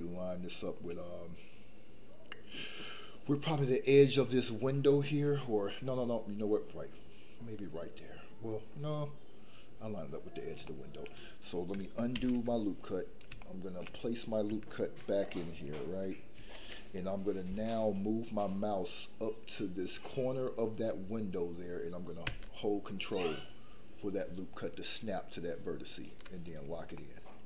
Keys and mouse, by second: 10.7 shift+middle click, 12.1 ctrl+z, 13.3 shift+middle click, 16.3 ctrl+r, 27.0 middle click.